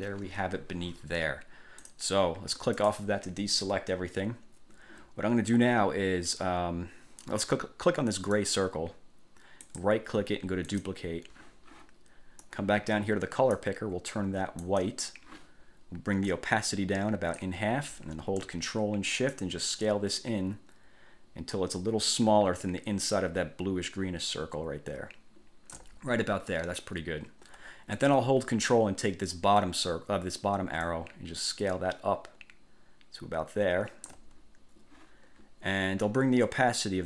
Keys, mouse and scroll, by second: 2.0 click, 3.0 click, 8.5 click, 9.8 click, 10.8 click, 12.6-13.9 drag, 14.8 click, 16.4-17.8 drag, 19.5-26.1 ctrl+shift+drag, 31.0-34.4 ctrl+drag.